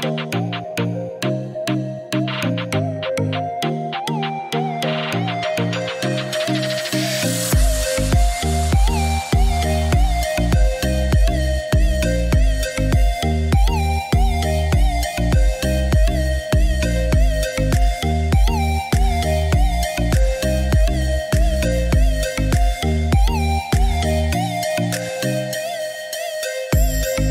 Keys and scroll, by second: 10.6 Escape, 18.8-20.1 typing, 22.0 Return, 25.0 2, 25.7 Return.